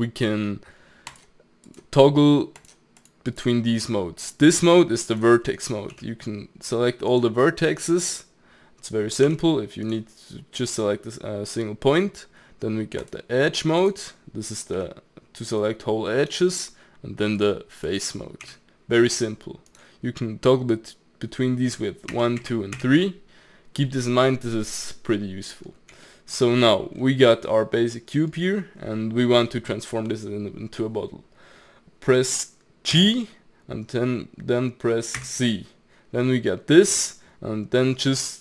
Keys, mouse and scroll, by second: 1.1-5.2 drag, 6.0 g, 9.3 g, 13.0 click, 14.8 g, 17.4 click, 18.4 g, 22.1 1, 22.4 2, 22.8 3, 25.0-30.2 middle drag, 32.9 g.